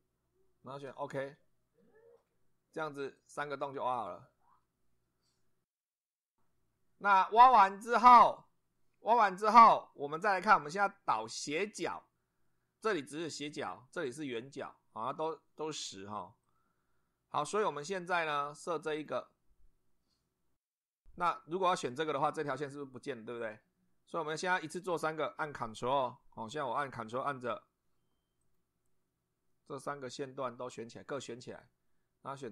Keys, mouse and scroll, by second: 1.0 click, 3.2 click, 5.8 click, 11.1 click, 12.4 middle click, 16.4 click, 17.4-17.8 scroll up 1, 18.0 scroll down 1, 18.9 click, 21.7 click, 28.4 ctrl+click, 30.0 ctrl+click.